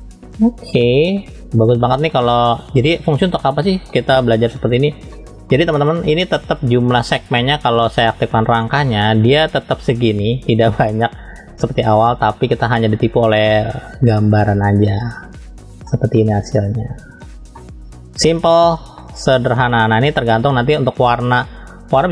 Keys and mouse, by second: 0.7 click, 1.0 click, 1.7 middle click, 2.7 click, 3.4 middle click, 5.1 middle click, 8.5 click, 14.3 click, 15.9-17.2 middle drag, 17.5 middle click, 19.0-20.3 middle drag.